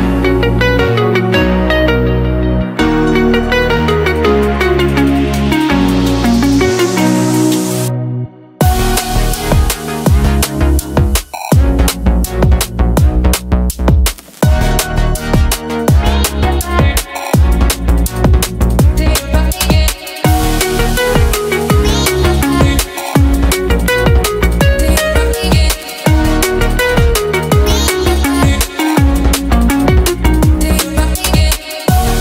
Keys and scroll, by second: 10.1 space.